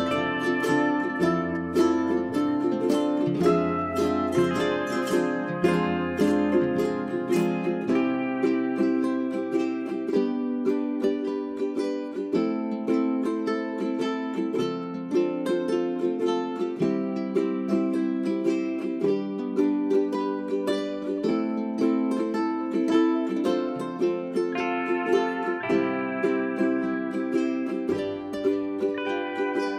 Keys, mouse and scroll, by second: 9.4 scroll down 1, 9.6 scroll up 1, 9.8-14.8 drag, 14.8 space, 14.9 click, 19.6 middle click, 23.2 click, 23.7 right click, 24.2 click, 25.3 shift+click, 28.0 g, 28.2-29.7 drag.